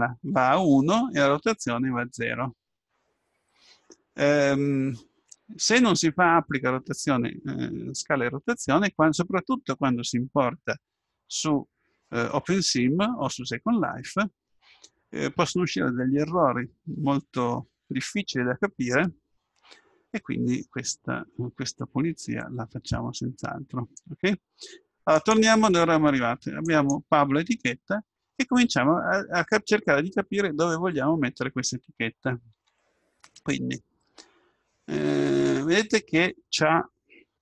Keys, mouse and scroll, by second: 25.3-27.2 drag, 27.8-31.3 middle drag, 32.6 Tab.